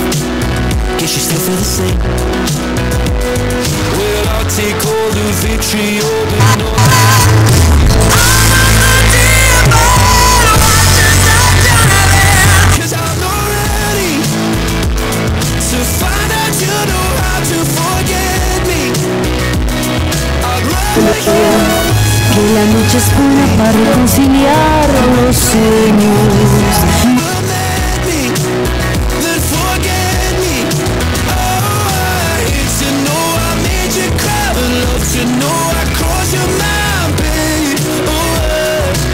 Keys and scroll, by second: 12.9 Page_Down, 27.8 Page_Down.